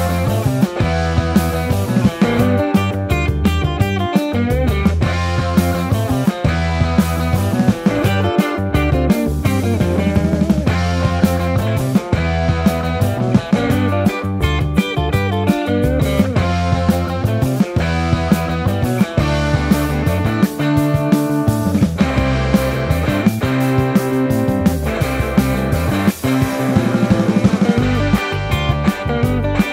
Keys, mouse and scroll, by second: 0.0-2.0 typing, 0.2 ctrl+z, 5.1 Tab, 5.3 ctrl+r, 6.1 3, 7.1 y, 7.7 Tab, 7.8 ctrl+2, 8.3 Tab, 8.5 ctrl+r, 9.3 ctrl+z, 9.5 ctrl+z, 9.7 ctrl+r, 10.3 Tab, 10.9 KP_1, 12.0 KP_7, 12.3 r, 13.3 s, 13.7 KP_1, 14.1 click, 14.9 KP_7, 15.5 r, 15.9 shift+middle click, 16.7 r, 16.8 z, 17.9 Tab, 17.9 Tab, 18.1 Tab, 18.3 KP_1, 19.0 Tab, 19.1 a, 19.4 shift+n, 19.7 Tab, 19.8 shift+click, 20.7 ctrl+shift+s.